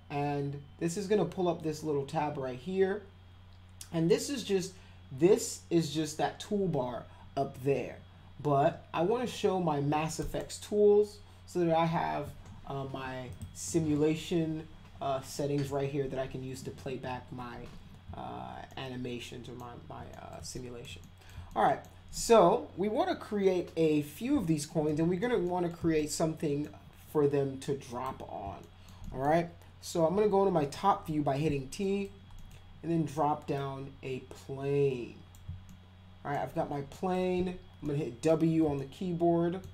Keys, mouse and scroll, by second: 10.2 click, 13.3 click, 18.7 alt+middle click, 20.1 middle click, 20.6 alt+middle click, 21.0 middle click, 21.5 alt+middle click, 24.9 alt+middle click, 25.4 middle drag, 26.0 alt+middle click, 27.9 click, 28.6 alt+middle click, 29.0 middle click, 30.1 t, 30.6 z, 31.8 middle click, 32.4 middle click, 33.6-35.3 drag, 35.7 alt+middle click, 36.9 middle click, 37.4 w, 37.8-38.3 middle drag, 38.8 alt+middle click.